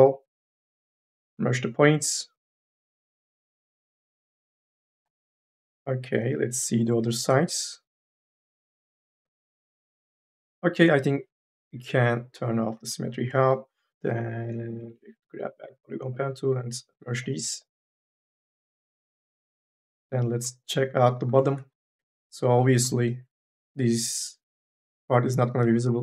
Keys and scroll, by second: 9.3 1, 14.6 m, 14.9 e, 21.5 3, 21.7 e, 25.4 u.